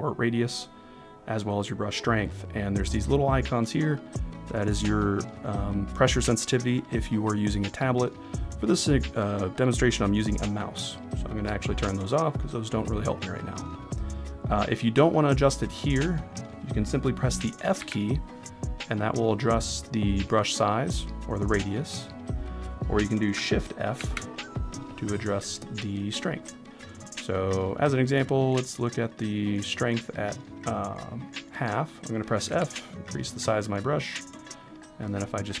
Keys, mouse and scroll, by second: 11.3 click, 17.8 f, 22.2 right click, 24.0 shift+f, 26.3 right click, 28.9-32.5 right drag, 32.5 f, 33.4 click.